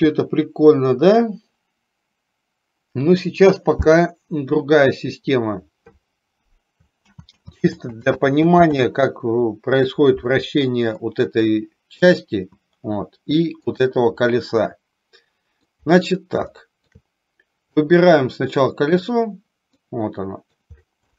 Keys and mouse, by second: 7.2 ctrl+z, 7.8 ctrl+z, 8.3 ctrl+z, 8.9 ctrl+z, 11.2-11.5 middle drag, 12.2 click, 13.8 click, 14.4-15.8 middle drag, 16.5 shift+middle click, 17.8 click, 18.9 click, 19.9-20.7 middle drag.